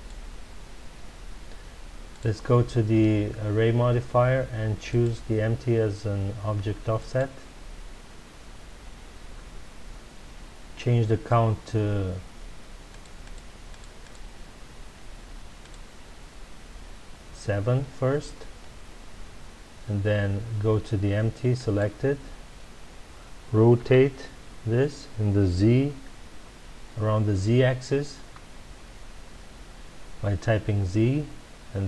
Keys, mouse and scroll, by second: 2.1 click, 4.8-7.9 drag, 12.9-17.5 drag, 21.5 click, 23.7 r.